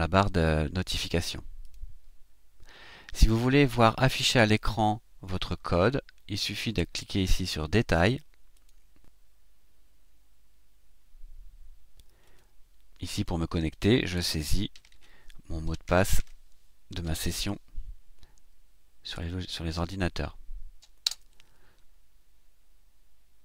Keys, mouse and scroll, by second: 1.5 click, 8.5 click, 12.2 click, 21.1 Return.